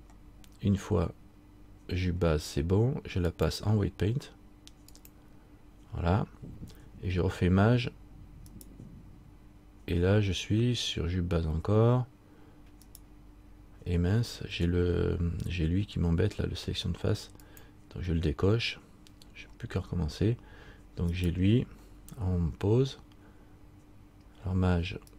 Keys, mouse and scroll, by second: 0.0 shift+right click, 3.5 shift+click, 8.7 shift+right click, 13.0 shift+right click, 17.6 click, 21.3 right click.